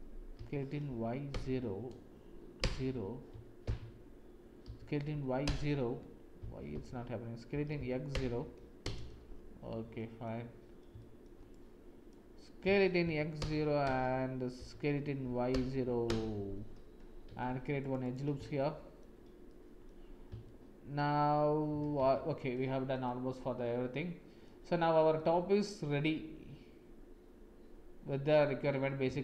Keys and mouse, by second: 4.6 s, 7.5 s, 9.6 click, 10.9 shift+click, 11.5 click, 12.6 s, 14.5 s, 17.4 ctrl+r, 18.5 shift+click, 19.4 click, 20.4 shift+middle click, 22.1 Tab, 23.1-24.4 drag, 25.1-28.3 drag, 28.3 middle click.